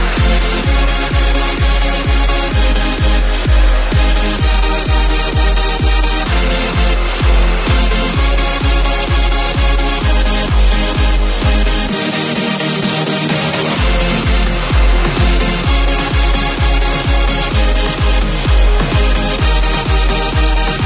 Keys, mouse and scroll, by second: 0.4 click, 1.5 click, 2.4 click, 2.8 double click, 3.2 click, 4.2 double click, 4.5 click, 7.6 ctrl+shift+z, 8.3 click, 9.3 shift+Left, 10.9 click, 13.0 shift+Up, 13.5 click, 13.7-14.3 alt+shift+scroll up 1, 14.3-15.1 shift+scroll up 2, 16.2 click, 18.1 click, 19.6 space, 19.7 click.